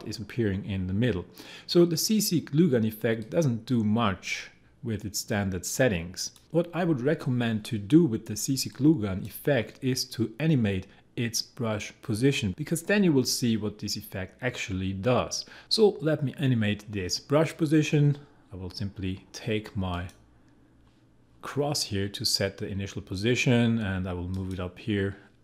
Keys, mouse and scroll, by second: 0.9 scroll down 1, 1.4-2.0 scroll up 1, 3.2-8.7 drag, 8.7-14.5 drag.